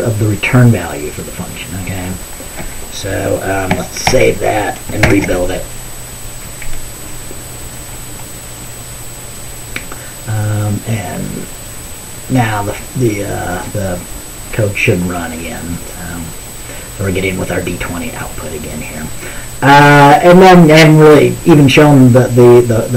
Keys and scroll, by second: 4.2 ctrl+s, 5.1 ctrl+b.